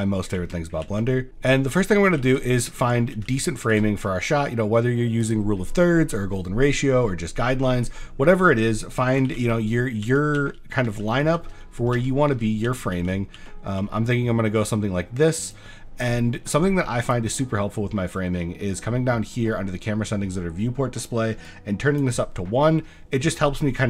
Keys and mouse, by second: 0.0-3.8 typing, 2.5 middle click, 5.2 click, 9.3-13.8 typing, 15.4 click, 17.0 click, 21.6 click.